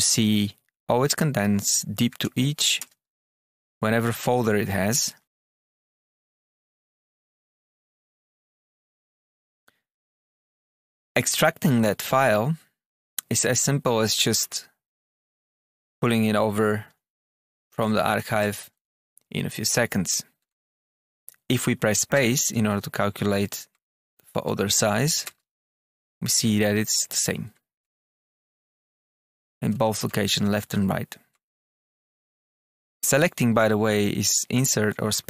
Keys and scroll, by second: 0.0 Down, 1.0 Return, 1.4 Down, 2.0 Page_Up, 2.1 Return, 2.5 Up, 2.8 Return, 3.2 Down, 3.4 Return, 4.3 Return, 4.8 Down, 5.0 Return, 6.1 Down, 7.1 Return, 7.3 Page_Up, 8.1 Page_Up, 8.2 Return, 8.9 Page_Up, 9.2 Return, 10.8 Tab, 12.0 Return, 14.3 Tab, 15.4 Page_Up, 15.6 Return, 17.4 alt+F9, 18.5 Return, 20.3 Tab, 20.8 Down, 22.1 space, 23.7 space, 24.4 Tab, 24.9 Down, 25.2 space, 27.3 Tab, 27.8 space, 29.6 space, 30.5 Tab, 31.3 space, 31.8 Tab, 32.0 space, 32.7 Up, 35.2 space.